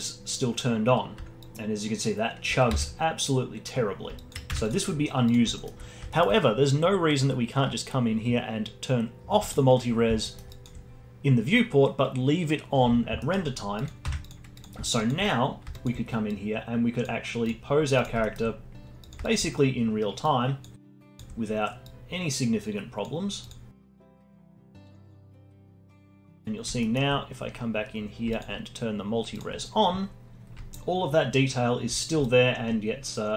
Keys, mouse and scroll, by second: 1.4-3.7 alt+drag, 3.7 ctrl+z, 4.1 alt+click, 4.5 Tab, 5.3 click, 5.5-9.2 alt+middle drag, 9.5 click, 10.2 alt+middle click, 10.5-13.2 alt+drag, 13.2 alt+middle click, 13.8 click, 14.1 Tab, 14.5-16.3 drag, 17.4 click, 17.9 drag, 18.2-18.6 alt+middle drag, 18.6-19.0 scroll down 2, 19.0 click, 20.2 click, 21.1-22.3 drag, 22.3 scroll down 2, 22.5 alt+click, 24.2 click, 24.7 click, 25.2 alt+click, 25.4 alt+middle click, 25.5 alt+click, 25.7 Tab, 25.9 z, 26.2 alt+middle drag, 26.3 click, 26.4-26.8 scroll up 4, 26.8-28.3 alt+middle drag, 28.3-30.1 alt+drag, 30.7-32.0 alt+drag, 32.0 scroll down 1, 32.2-33.3 alt+drag.